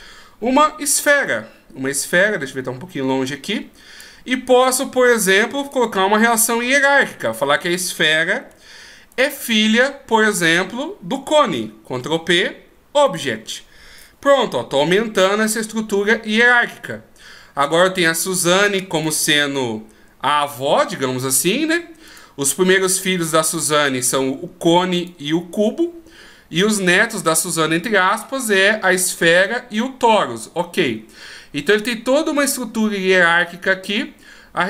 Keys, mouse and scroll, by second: 2.2-3.2 scroll down 1, 3.2 click, 3.2-4.0 scroll down 1, 6.0-8.3 scroll up 1, 8.3 scroll up 1, 9.1 shift+right click, 11.9 ctrl+p, 15.1 scroll down 1, 18.9 scroll down 3, 18.9 right click, 22.1 right click, 31.5-31.9 scroll down 1.